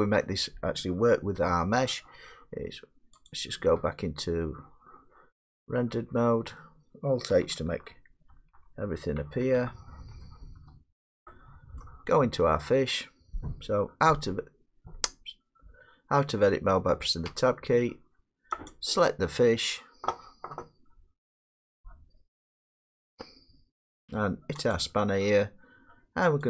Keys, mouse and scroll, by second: 0.0 middle click, 0.2 middle click, 3.3 click, 6.6 middle click, 8.3 alt+h, 10.3-10.7 shift+middle click, 10.6 scroll up 3, 10.7 middle click, 11.8 shift+middle click, 17.3 Tab, 18.7 click, 24.8 click.